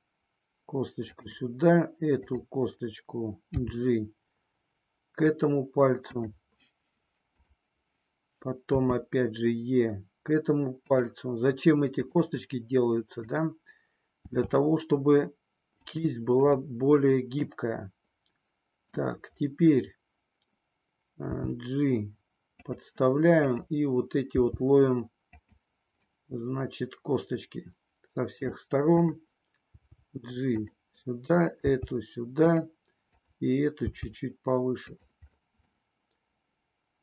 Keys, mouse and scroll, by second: 2.2 click, 3.5 g, 6.2 click, 7.3 click, 8.6 e, 10.9 click, 13.2 click, 14.2 e, 15.9 click, 16.8-19.2 middle drag, 21.4 g, 22.6 click, 24.3 g, 25.4 click, 26.3-28.5 middle drag, 29.6 g, 30.6 click, 31.3 click, 31.6 g, 33.2 click, 33.9 g, 35.6-37.0 middle drag.